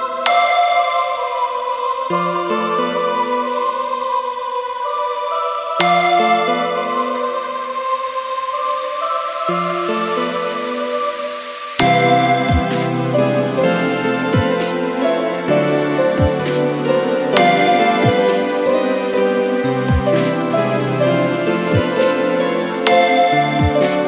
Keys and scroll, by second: 2.7 Return, 20.8 Caps_Lock, 21.2 m, 21.9 e.